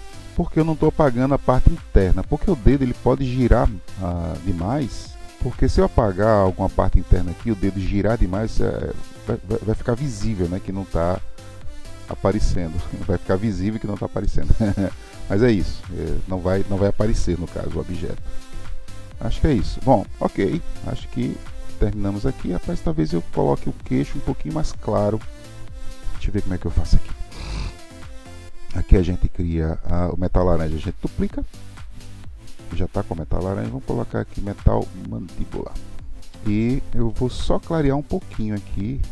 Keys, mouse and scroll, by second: 1.0 alt+z, 14.9-16.2 scroll down 4, 16.2-17.4 shift+middle drag, 17.4 alt+z, 18.1 scroll down 2, 19.6-20.1 scroll down 4, 20.1 Tab, 20.9-23.5 middle drag, 23.5 click, 24.4-25.5 scroll up 5, 31.7-32.5 drag, 33.5-36.3 drag, 36.9 click.